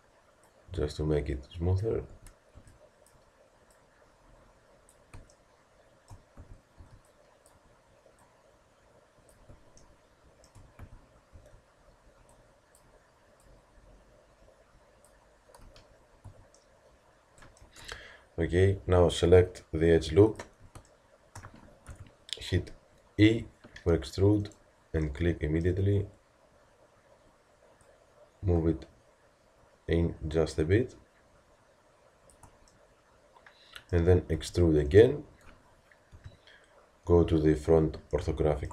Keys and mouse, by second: 2.1 a, 3.8-4.9 drag, 5.4 click, 6.4 a, 8.2-10.0 drag, 10.1 click, 10.8 a, 13.4-14.8 drag, 15.6 z, 16.3 a, 20.3-21.9 drag, 21.9 KP_Decimal, 23.2 e, 27.8-29.6 drag, 32.8 middle click, 33.6 middle click, 34.3 e, 36.1 KP_1, 38.1-38.7 middle drag.